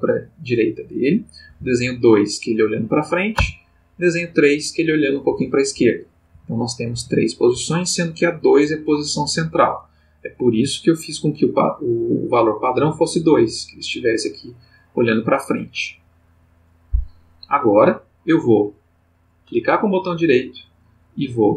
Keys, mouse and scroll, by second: 1.4 Right, 3.3 Right, 5.3 Left, 6.3 Right, 7.0 Right, 7.5 Left, 10.4 click, 19.4 right click.